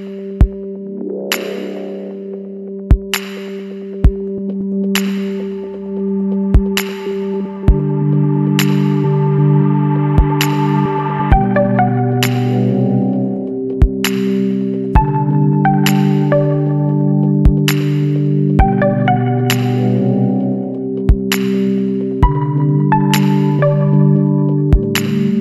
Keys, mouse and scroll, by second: 0.9 click, 2.4 ctrl+click, 5.2 click, 7.5 click, 8.2 click, 9.1 click, 10.9 click, 12.8 click, 14.8 click, 16.2 click, 17.4 click, 18.4-19.1 drag, 19.5 click, 20.6 click, 23.1 scroll up 1, 24.5 BackSpace.